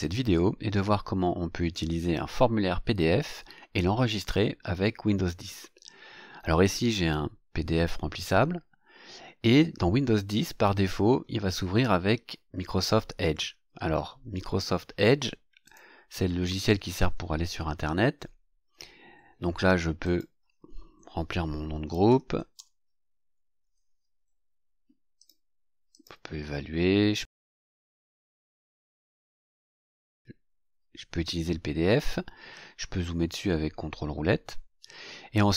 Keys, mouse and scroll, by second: 15.7 click, 20.0 click, 21.3-23.3 typing, 25.2 click, 25.9 click, 27.8 click, 29.5 click, 32.6-33.4 ctrl+scroll up 4, 33.9-34.2 ctrl+scroll up 3.